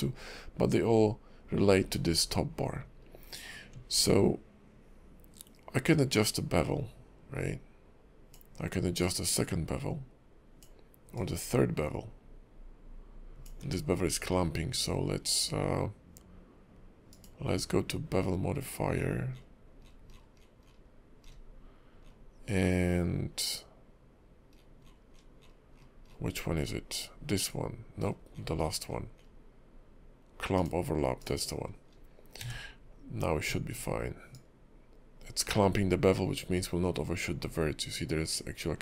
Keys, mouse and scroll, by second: 2.9-3.3 scroll up 2, 3.3-3.7 scroll down 2, 5.9 ctrl+click, 9.0 ctrl+click, 11.1 ctrl+click, 13.6 ctrl+`, 31.5-31.9 scroll up 3, 31.9-32.4 scroll down 3, 32.4 q, 34.3 ctrl+click.